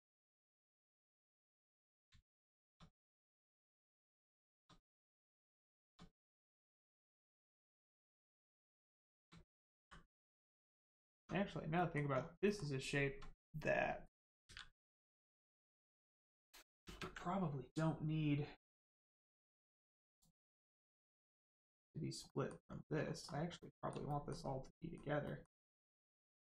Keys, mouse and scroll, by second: 0.4 middle click, 1.6 click, 2.2 shift+click, 3.0 click, 3.9 shift+click, 4.8 click, 5.2 shift+middle click, 6.0 scroll up 1, 6.6 shift+middle click, 7.8 shift+click, 9.8 click, 10.4 click, 10.9 scroll down 1, 11.1 Tab, 11.7 middle click, 12.0-12.4 scroll down 1, 12.4 middle click, 14.8 scroll down 1, 15.1 middle click, 16.8 ctrl+space, 19.3 click, 21.4 click, 22.2 middle click, 22.6-23.5 scroll up 1, 23.5 middle click, 24.0 shift+middle click.